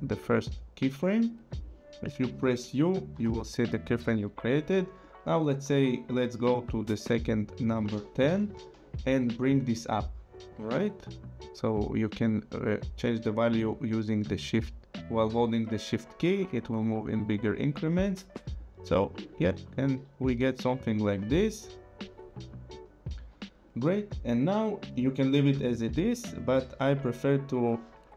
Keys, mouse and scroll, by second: 0.1 click, 3.1 u, 5.0 click, 8.4 ctrl+Right, 9.7 click, 12.1 click, 19.8 click, 21.1 space, 23.2 space, 24.5 click, 27.0 click.